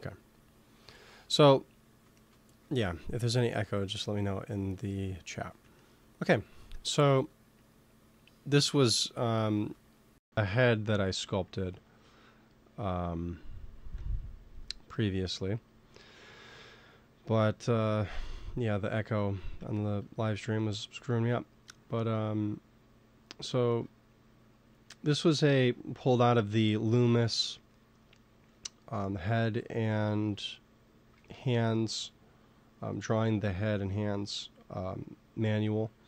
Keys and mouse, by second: 0.8 ctrl+s, 2.5 ctrl+s, 5.7-7.6 middle drag, 8.7-10.4 middle drag, 10.4-13.4 drag, 14.0 Tab, 14.5 Tab, 19.6-23.4 middle drag, 31.0 ctrl+s, 34.5 middle click.